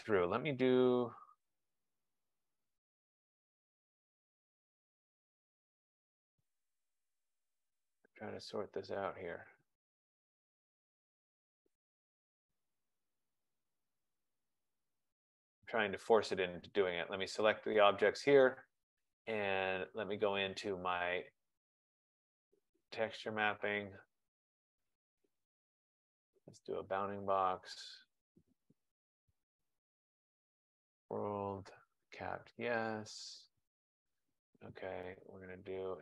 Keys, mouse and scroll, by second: 0.6 click, 3.9 click, 5.4 click, 9.8 click, 11.7 click, 15.4 right click, 17.9 click, 21.5 click, 23.2 click, 24.4 click, 27.0 click, 29.4 F15, 30.0 click, 31.1 click, 32.8 click.